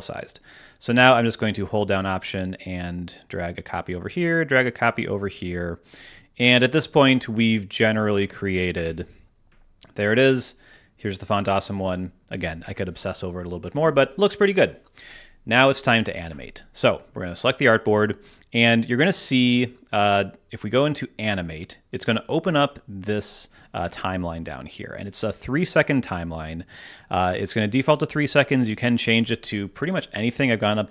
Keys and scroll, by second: 8.7 BackSpace, 9.2 BackSpace.